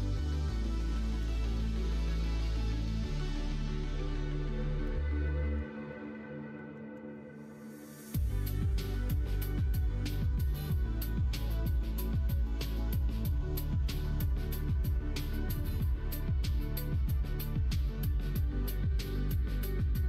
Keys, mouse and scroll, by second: 1.5 middle click, 2.8 middle click, 3.5 ctrl+z, 4.5 click, 5.4 click, 5.6 middle click, 6.6 ctrl+z, 6.8 ctrl+z, 7.1 middle click, 8.3 g, 10.9 middle click, 11.8 3, 13.1 click, 14.3 click, 14.9 shift+click, 15.7 g, 19.3 Tab, 19.5 click.